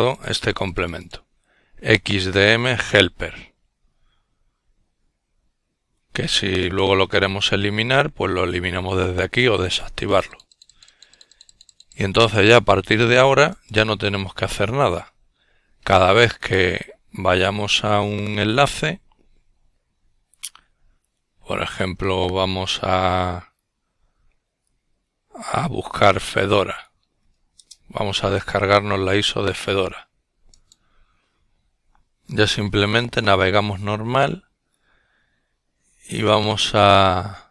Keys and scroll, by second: 20.8-23.0 typing, 25.1 typing.